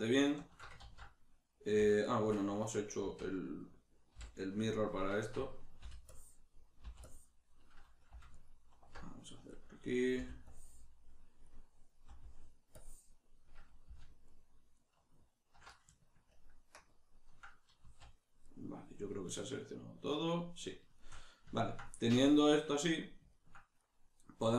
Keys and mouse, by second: 0.0 alt+shift+right click, 0.8 ctrl+z, 2.0 alt+shift+right click, 3.0 z, 8.3 alt+shift+right click, 10.2 b, 14.3 alt+shift+right click, 14.8 alt+shift+right click, 16.4 ctrl+KP_Add, 17.8 z, 18.4-24.5 middle drag.